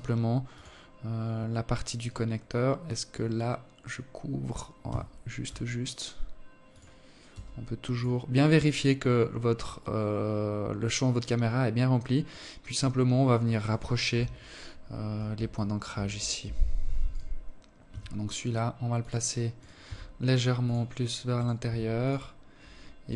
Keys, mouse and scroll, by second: 0.5 right click, 1.3-2.0 scroll up 2, 3.4 g, 5.8 s, 10.8 right click, 12.6 KP_7, 14.0 alt+shift+click, 14.6 scroll up 2, 14.9 Tab, 15.6 right click, 16.4 g, 18.1 right click, 19.8 right click, 20.2 g, 20.8-21.6 scroll down 1, 21.6 right click, 22.0 g.